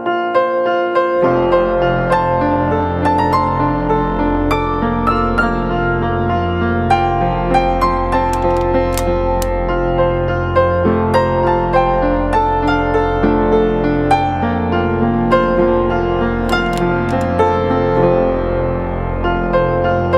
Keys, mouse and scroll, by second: 12.8 Down, 18.7 right click.